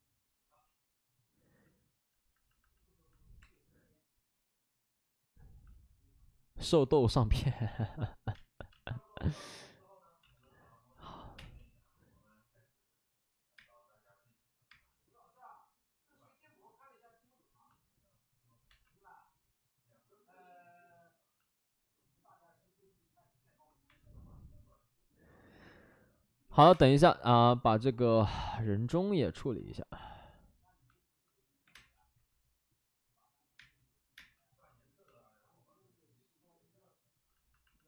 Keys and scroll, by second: 1.7 ctrl+z, 3.3 3, 8.3 space, 8.7 space, 9.2 space, 10.1 ctrl+z, 10.3 ctrl+z, 11.2 5, 11.3 space, 13.5 space, 14.7 space, 18.6 2, 23.8 1, 26.7 3, 26.7 space, 26.9 3, 28.2 1, 32.2 space, 32.2 5, 33.5 space, 34.1 space, 37.5 space.